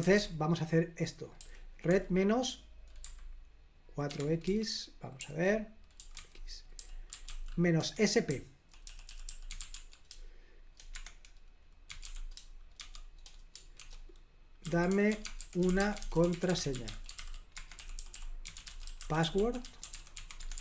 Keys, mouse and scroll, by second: 0.0 super+l, 1.3 typing, 3.0 typing, 4.0-4.4 typing, 5.7-20.6 typing, 7.7 Escape.